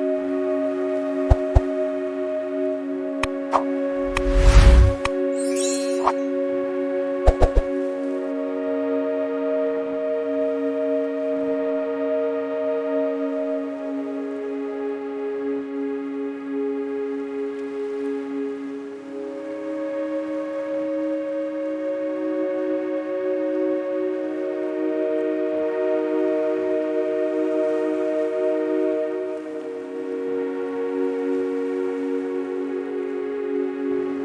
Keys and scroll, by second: 0.1 space, 0.8 ctrl+t, 1.2-2.6 typing, 6.5 space, 7.7 space, 9.2 space, 28.0 KP_3, 30.3 Tab, 31.6 KP_3, 31.8 KP_4.